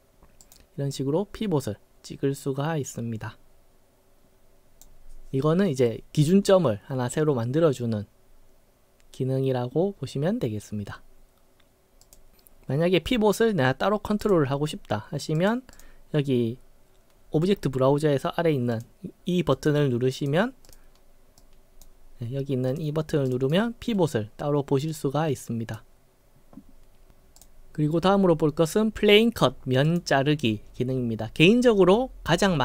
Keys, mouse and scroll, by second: 0.4 click, 0.9-4.8 drag, 12.0 click, 14.2 click, 15.3 click, 18.7 click, 19.5 click, 20.2 click, 20.6 click, 21.4-21.8 drag, 22.7 click, 23.2 click, 23.3 right click, 24.9-25.7 drag, 27.4 click, 29.9 click.